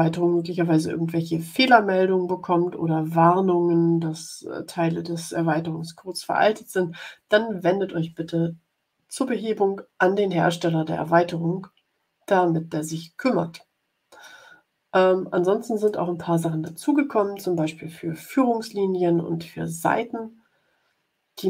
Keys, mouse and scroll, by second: 15.8 click.